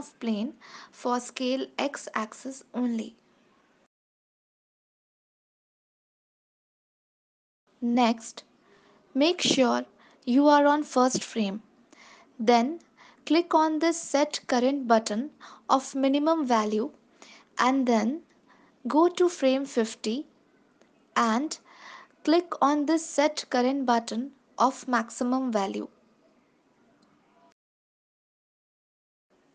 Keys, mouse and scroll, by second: 0.3 click, 6.7 click, 7.6 click, 8.1 click, 9.2 click, 13.2 click, 19.7 click, 21.5 click, 23.3 click.